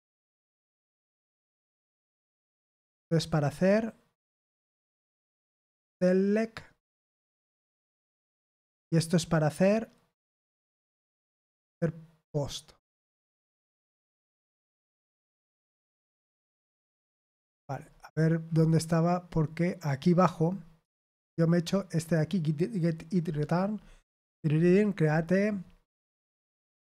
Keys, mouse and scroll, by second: 0.4-1.4 scroll up 2, 2.6-4.4 scroll up 4, 4.4-5.0 scroll up 1, 5.0-5.5 scroll down 2, 6.1-6.9 scroll down 4, 7.7-8.1 scroll down 2, 13.3-13.8 scroll down 2, 16.2-17.2 scroll up 2, 17.3 scroll down 2, 17.5 scroll up 2, 17.8-18.4 scroll down 2, 18.4-18.9 scroll up 2, 21.1 scroll up 1, 21.9 click, 23.2-26.8 scroll down 10.